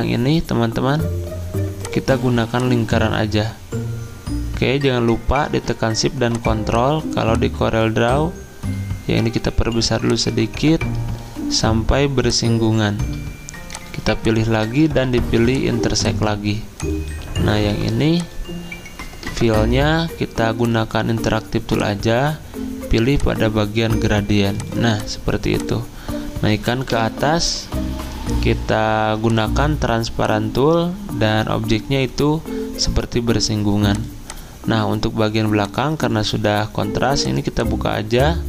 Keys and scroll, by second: 14.7 ctrl+z, 17.7 Delete, 26.9 ctrl+Home.